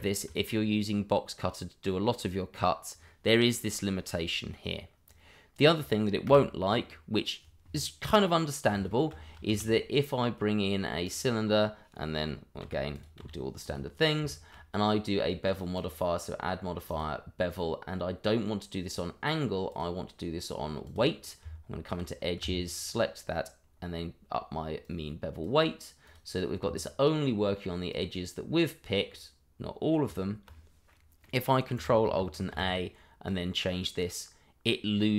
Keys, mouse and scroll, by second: 0.0 shift+middle click, 0.6 middle click, 5.0 click, 6.2 Delete, 8.4 middle click, 9.0 shift+middle click, 9.1-9.5 scroll up 1, 9.5 shift+a, 11.0 click, 12.6 g, 12.9 click, 13.2 r, 14.0 scroll up 1, 14.3 shift+middle click, 15.7 click, 18.8-19.6 scroll up 1, 19.7 click, 21.4 Tab, 22.6 alt+click, 23.6 click, 29.1 middle click, 30.1 Tab, 30.9 middle click, 32.3 ctrl+alt+a, 33.2 click.